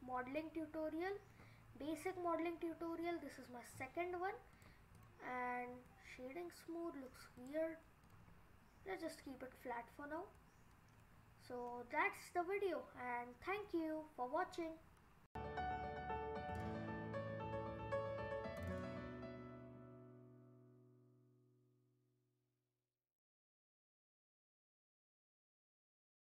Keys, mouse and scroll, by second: 0.1-0.4 scroll down 2, 0.4 middle click, 1.8 scroll up 3, 2.1 middle click, 3.3-3.9 scroll down 7, 4.5 right click, 5.7 scroll down 2, 5.9 middle click, 6.7 middle click, 7.4 right click, 8.4-9.1 scroll up 9, 9.1 middle click, 9.4-10.4 scroll down 5, 10.4-11.1 scroll down 2, 11.1-11.7 scroll down 4, 11.7 middle click, 15.2 F1.